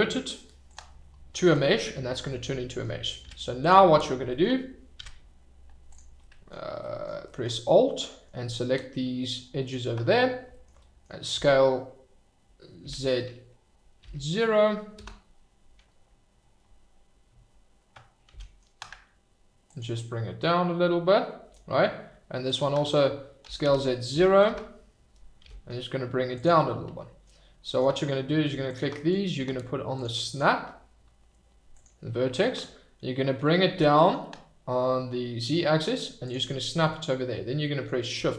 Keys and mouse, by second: 1.6 middle drag, 2.3 middle drag, 3.2 Tab, 4.9 Tab, 6.2 middle click, 6.8 click, 7.9 click, 9.4 alt+middle click, 10.8 click, 11.3 s, 12.8 z, 14.0 0, 15.0 Return, 18.3 g, 18.4-19.6 middle drag, 19.6 click, 19.9-21.5 middle drag, 22.4 alt+click, 23.4 s, 23.6 z, 24.1 0, 24.4 Return, 25.4 g, 26.3 click, 26.6 middle click, 29.9 click, 30.4-32.0 drag, 33.7 g, 33.8 middle click, 36.2 click, 37.6 middle click.